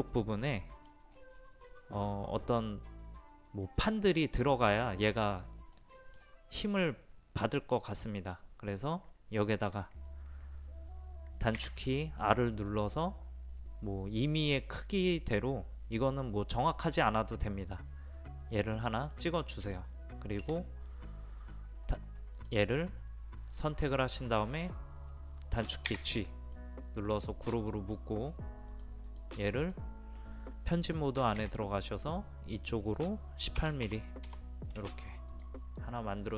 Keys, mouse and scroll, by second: 1.1-3.7 scroll up 1, 5.8 middle click, 6.3-7.0 scroll up 1, 11.6 r, 12.7 click, 19.2 middle click, 20.9 space, 22.4 click, 25.9 a, 26.6-28.3 middle drag, 28.3-28.8 scroll up 1, 31.4 p, 31.9-33.0 drag, 33.6 KP_1, 33.9 KP_8, 35.4 click, 35.9-36.3 middle drag.